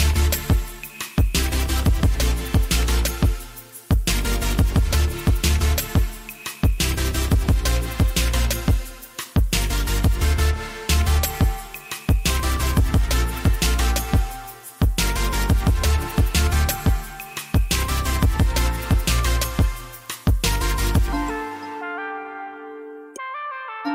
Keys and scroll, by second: 0.5 Tab, 3.7 g, 6.8 alt+z, 7.2 1, 8.7 alt+z, 13.6 2, 14.2 2, 19.4 g, 21.3 alt+z, 21.4 alt+z, 22.3 alt+z.